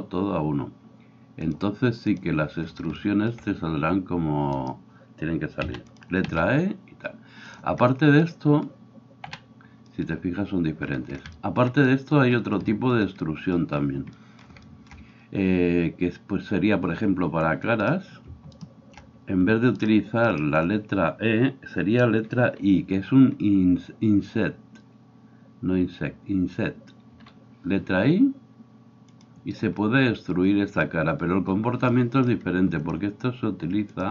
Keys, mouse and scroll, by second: 5.7 e, 6.0-34.1 middle drag, 6.3 s, 9.3 a.